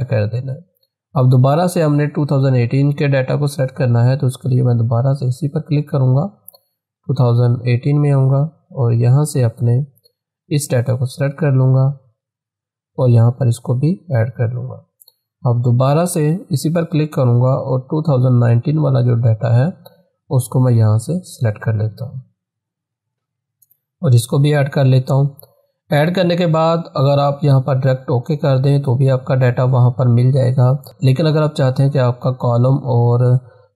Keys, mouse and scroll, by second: 5.3-15.3 drag, 16.3 click, 19.1 scroll up 1, 20.3-26.0 drag.